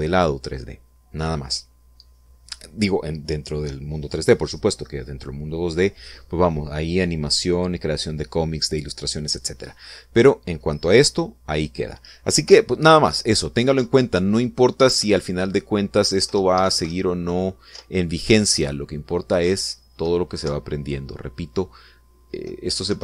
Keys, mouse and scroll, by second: 13.5 p, 14.1 Left, 14.8 Up, 15.9 Right, 17.3 Up, 17.6 Right, 17.9 Left, 18.7 Up, 20.5 Left, 21.4 Right.